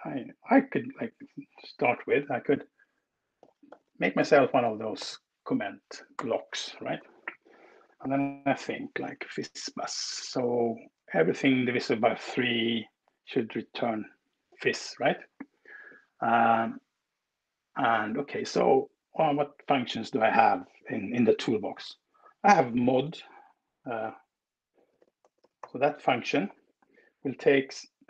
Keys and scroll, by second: 2.1 Return, 3.1-6.3 typing, 7.2 Return, 24.7-25.9 typing.